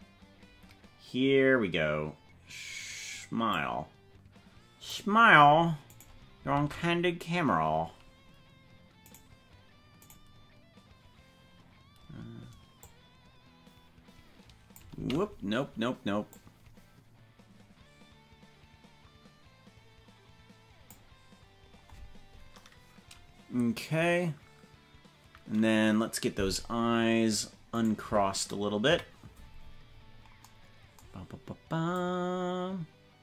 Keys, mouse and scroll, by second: 3.5-5.0 drag, 6.0 right click, 6.6 ctrl+Tab, 10.1 right click, 12.8-15.3 drag, 15.3 ctrl+z, 16.3-21.1 drag, 28.4 right click, 28.8 KP_Decimal, 29.7-30.2 scroll down 15, 32.0 click.